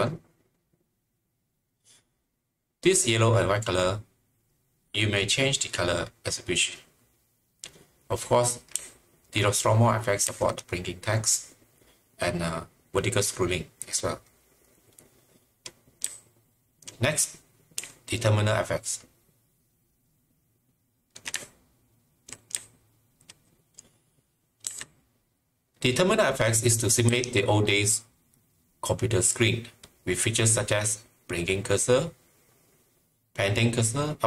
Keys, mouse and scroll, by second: 8.8-10.2 typing, 11.4-12.1 typing, 16.0-23.2 typing, 24.7 typing, 27.1-28.1 typing.